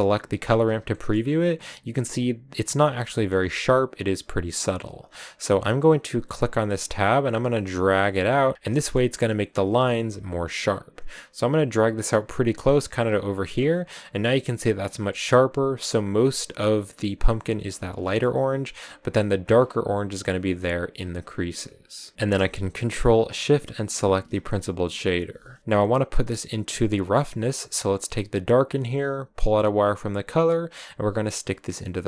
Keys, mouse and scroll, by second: 0.7 shift+middle click, 1.0 scroll up 4, 2.8 scroll down 1, 3.0-5.6 shift+middle drag, 5.6-8.5 drag, 8.5 scroll up 2, 8.6 shift+middle click, 9.5-12.0 drag, 12.9 scroll down 6, 13.4 scroll up 6, 14.9-18.2 shift+middle drag, 18.2-18.7 scroll up 2, 19.5 scroll down 4, 20.8-22.1 drag, 22.1-24.0 shift+middle drag, 24.0 ctrl+shift+click, 25.6-27.4 middle drag, 27.4-31.9 drag.